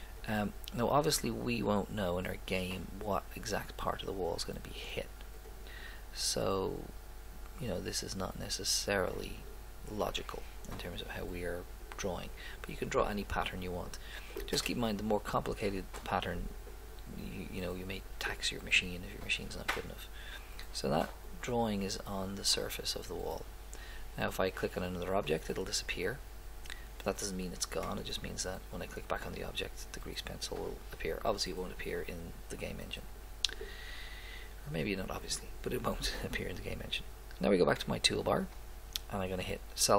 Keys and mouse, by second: 0.2 click, 5.4-7.7 drag, 19.3 middle click, 19.5 middle click, 19.9 middle click, 20.3 middle click, 20.4 middle click, 20.8 middle click, 37.8-39.6 drag.